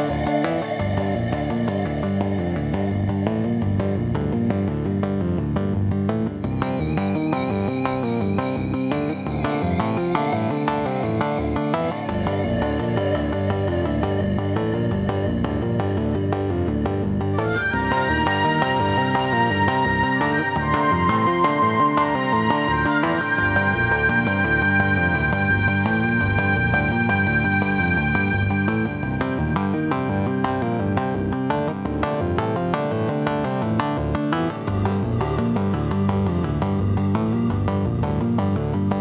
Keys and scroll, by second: 2.4 x, 5.1 x, 7.0 c, 9.4 x, 10.6 m, 25.0 x, 27.6 x.